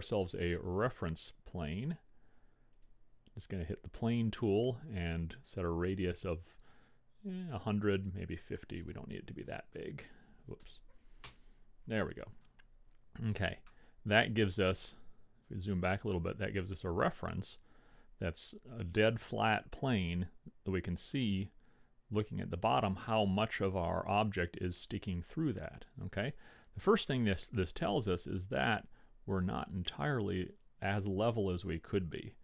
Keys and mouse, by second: 0.8-2.7 drag, 3.0-4.8 drag, 8.1-9.6 drag, 10.0 KP_0, 13.8-15.4 middle drag, 15.4-16.8 drag, 16.8-17.9 middle drag, 24.8-27.4 middle drag, 27.9-29.9 middle drag.